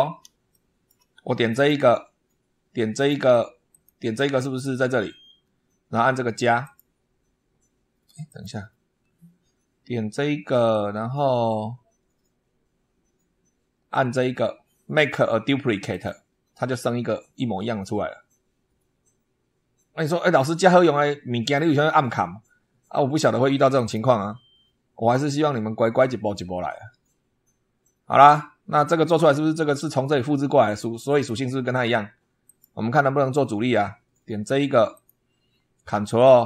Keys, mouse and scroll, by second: 0.3 shift+middle click, 1.3 click, 2.8 click, 3.5 click, 4.0-4.3 scroll up 1, 6.5 click, 8.1 click, 15.7 click, 23.6 click, 28.1 scroll up 2, 32.3 click, 34.8 click.